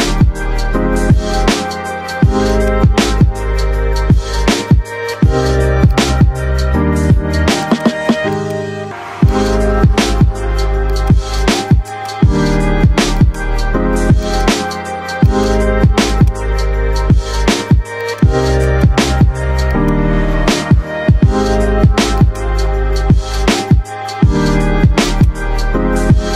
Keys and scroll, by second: 1.3 ctrl+k, 5.1 c, 15.4 c, 20.4 c.